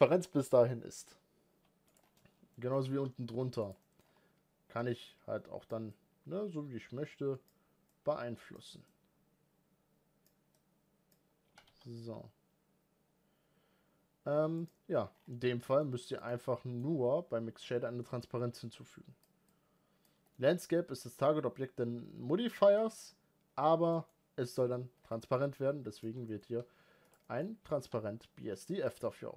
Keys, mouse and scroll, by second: 1.8 scroll down 1, 1.9 middle click, 2.5 g, 3.6 middle click, 3.8-4.8 scroll up 1, 4.8-11.2 drag, 11.2 g, 14.9-16.0 scroll down 4, 16.0-17.6 scroll down 1, 17.6-18.3 scroll down 1, 18.3-19.0 drag, 20.1-24.7 middle drag, 24.7 scroll down 1, 24.8-25.3 scroll up 6, 25.8 click, 26.1 middle click, 26.3 g, 27.0 middle click, 27.2 scroll down 2, 27.4 g.